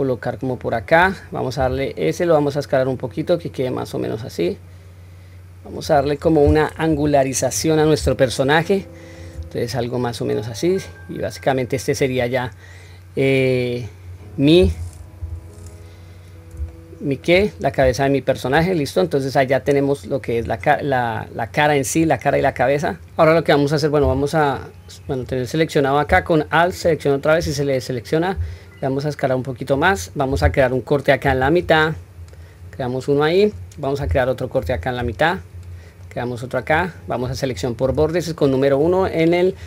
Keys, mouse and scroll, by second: 6.9 KP_1, 8.3-9.2 shift+middle drag, 9.7-12.1 middle drag, 12.5-14.6 middle drag, 15.2 KP_1, 16.7-17.3 shift+middle drag, 17.6-18.0 scroll up 2, 18.0-18.5 shift+middle drag, 18.8-19.3 scroll down 1, 19.8-20.3 scroll down 1, 25.1 click, 26.7 alt+click, 28.3 s, 31.2 ctrl+r, 32.8-33.5 middle drag, 34.6 ctrl+r, 36.0 middle click, 37.1 middle click, 37.8 1, 38.8 click.